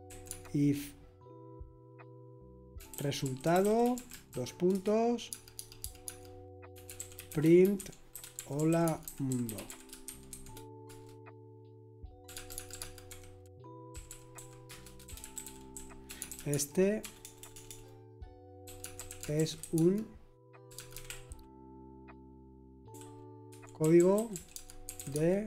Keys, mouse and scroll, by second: 0.0-0.8 typing, 2.5-10.8 typing, 12.3-21.2 typing, 14.3 Escape, 23.5-25.4 typing.